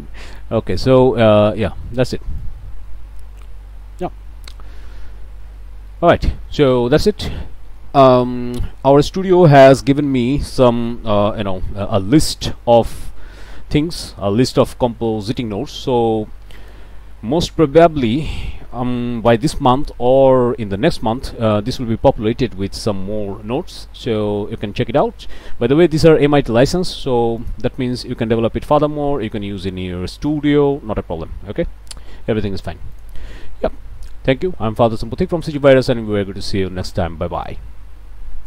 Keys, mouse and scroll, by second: 0.6 scroll up 2, 1.0 click, 1.5 scroll down 2, 2.4-4.3 drag, 5.9 click, 16.6 click, 27.4 click, 33.0 click, 37.4 click.